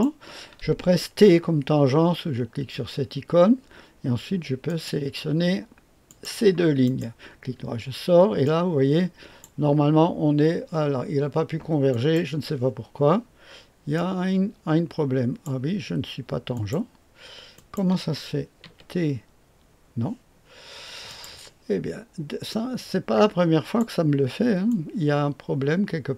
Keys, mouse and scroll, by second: 2.7 t, 4.6 click, 6.0 click, 6.8 click, 8.4-9.4 drag, 11.9 click, 13.9-15.4 drag, 16.5 click, 17.5 click, 18.6 typing, 21.0 click, 22.4-23.8 drag, 24.7-26.1 drag.